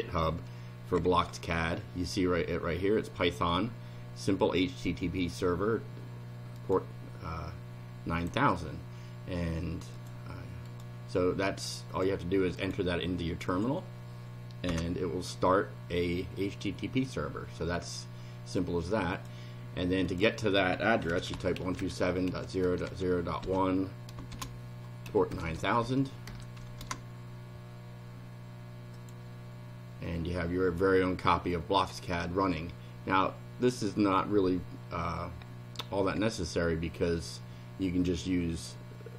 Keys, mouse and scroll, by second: 6.6 right click, 8.2 click, 10.0 click, 10.7 right click, 11.9 click, 12.6 right click, 13.5 click, 14.7 Return, 19.2 click, 20.1 click, 21.0-26.3 typing, 26.8 Return, 29.0 click.